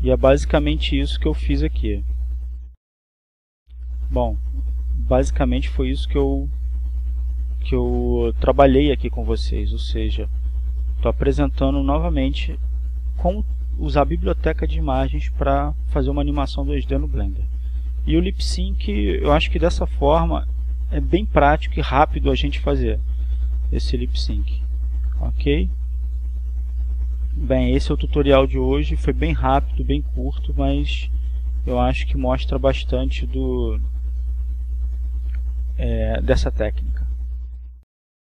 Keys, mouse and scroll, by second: 4.5-12.1 drag, 12.7-14.2 drag, 17.4-18.7 drag, 19.1-30.6 drag, 33.5 right click, 36.6 right click, 37.5 click.